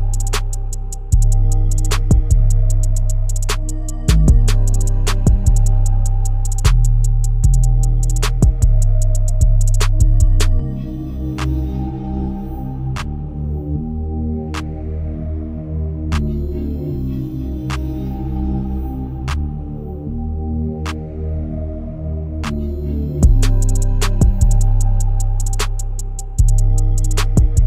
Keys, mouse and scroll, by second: 2.4-5.2 drag, 5.2-5.6 scroll down 3, 5.6 shift+middle click, 6.5 KP_0, 7.9-8.4 scroll down 1, 8.4-10.0 shift+middle drag, 10.0 KP_Decimal, 10.9-12.9 shift+middle drag, 12.9-15.1 drag, 15.1-18.1 middle drag, 18.8-20.2 middle drag, 20.2-20.6 scroll down 2, 20.7-23.7 shift+middle drag, 23.7 KP_0, 24.4-25.0 scroll down 4, 25.0-25.6 shift+middle drag, 25.6 scroll down 1, 25.9-27.6 shift+middle drag.